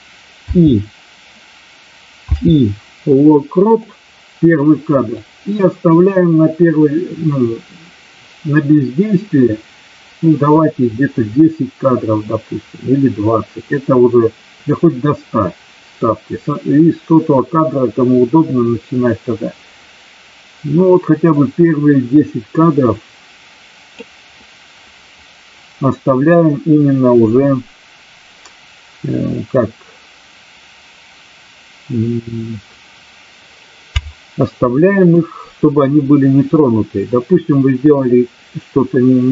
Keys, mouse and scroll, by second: 5.1-23.9 drag, 36.5-39.3 drag.